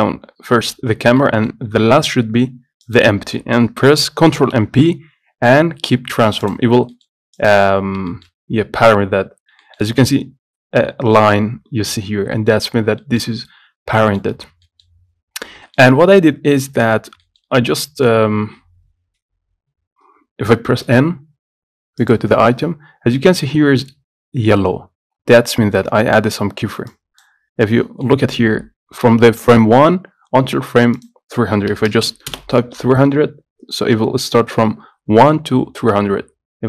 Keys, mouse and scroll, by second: 1.3-2.9 middle drag, 2.9 shift+click, 4.5 ctrl+p, 6.6 click, 7.0 middle click, 7.5 click, 7.9-8.2 scroll up 1, 8.2-9.5 shift+middle drag, 9.5 scroll up 1, 9.8-12.2 shift+middle drag, 12.2 scroll down 4, 12.5 shift+middle click, 12.9 scroll down 1, 13.2-14.6 middle drag, 14.6 scroll down 3, 14.8 middle click, 15.0-15.8 scroll up 2, 15.8-17.1 shift+middle drag, 17.1-17.4 scroll up 3, 17.4 shift+middle click, 17.7 scroll down 5, 18.5-21.0 scroll up 1, 21.0 n, 22.1 click, 27.0 click, 27.6-27.9 scroll up 2, 27.9 middle click, 28.2 scroll up 1, 32.1 KP_0.